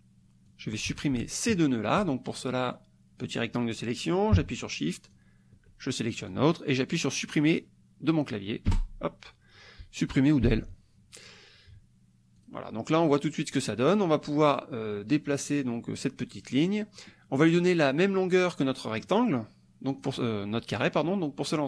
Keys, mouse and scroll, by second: 0.5 click, 1.4 shift+click, 2.8 click, 4.8 shift+click, 8.7 Delete, 10.5 Delete, 12.4 click, 12.9 click, 13.3 middle click, 13.7 click, 15.4-17.2 drag, 18.7 click, 19.9 click.